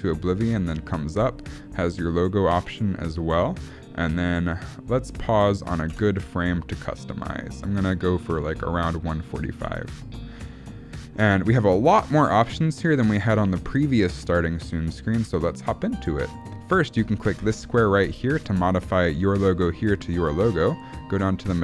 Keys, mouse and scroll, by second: 6.0 space, 7.8 click, 17.4 click.